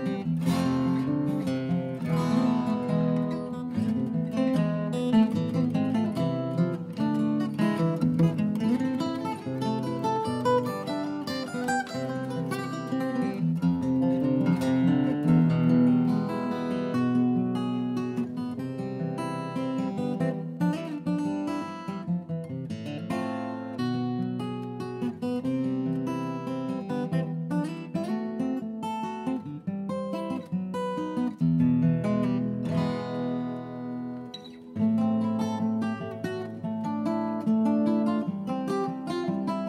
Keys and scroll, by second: 2.7 Delete, 3.4 shift+Right, 3.4 shift+Right, 4.1 shift+Down, 5.6 Down, 5.7 Return, 9.7 shift+Right, 9.9 Escape, 13.1 shift+space, 19.3 ctrl+3, 19.4 Return, 20.1 3, 20.2 Return, 20.7 Up, 20.9 Escape, 22.4 Delete, 25.8-27.6 typing, 27.7 Delete, 36.7 Delete.